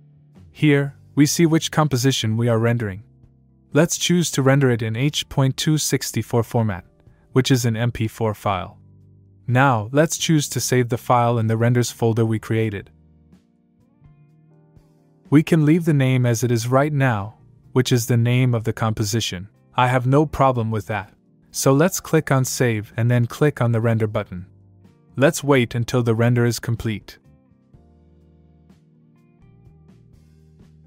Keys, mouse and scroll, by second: 4.7 click, 7.8 click, 9.5 click, 13.4 click, 14.2 click, 21.9 click, 23.4 click.